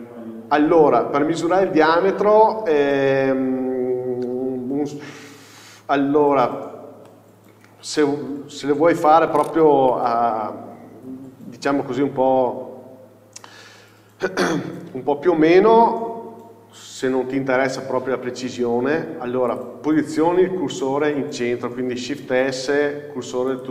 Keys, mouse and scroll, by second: 1.8 scroll up 1, 3.6 scroll down 1, 5.8 middle click, 6.7-7.4 scroll down 1, 7.7-11.4 middle drag, 8.5 KP_7, 10.2 z, 11.4 KP_4, 12.6 scroll up 1, 14.0 scroll down 1, 15.2 KP_4, 19.8 shift+s, 20.3 scroll up 1.